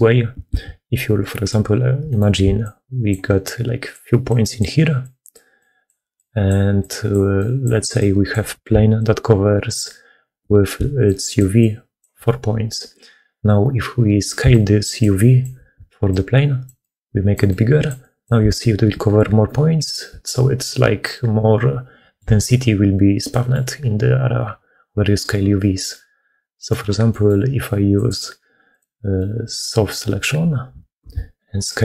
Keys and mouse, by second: 0.5 ctrl+z, 1.1 click, 1.9 click, 2.3-10.1 d, 10.6-11.9 d, 10.9 click, 14.3-22.0 d, 14.4 click, 16.0 click, 20.1-22.0 drag, 23.2 click, 26.4 click, 26.9 click, 29.0 click, 30.9 s.